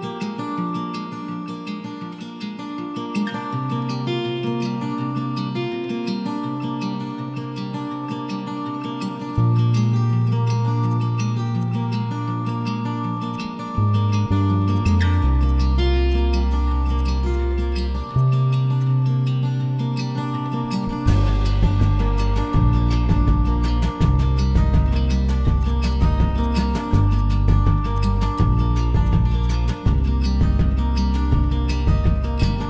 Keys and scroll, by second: 3.4 ctrl+z, 4.0 ctrl+z, 5.1 a, 6.3 Escape, 11.4 p, 13.7 Escape, 15.2 p, 16.7 Escape, 17.2 p, 18.4 e, 19.8 Escape, 19.9 Escape, 20.1 Escape, 26.9 m, 28.4 ctrl+x, 28.6 Escape, 29.0 Escape.